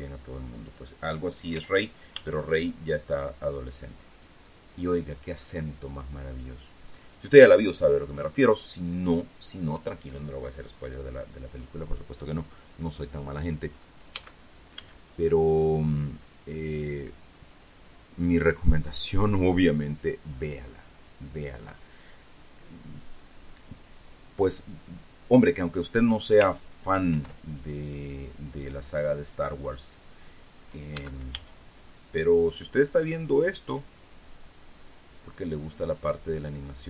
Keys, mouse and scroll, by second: 2.1 a, 3.1-4.2 drag, 3.1 b, 14.7 a, 16.0 click, 27.7 ctrl+r, 28.1 ctrl+click, 30.7 click, 31.5 a, 32.3 click, 34.4-36.7 drag.